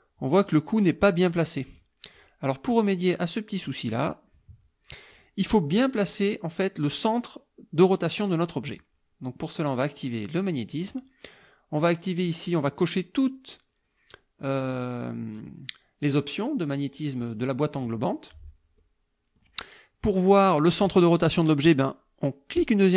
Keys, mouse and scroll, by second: 2.2 click, 3.6 click, 5.1 click, 5.8 click, 10.7 click, 11.8 click, 12.7 click, 14.7 click, 15.4 click, 18.8 click, 22.6 click.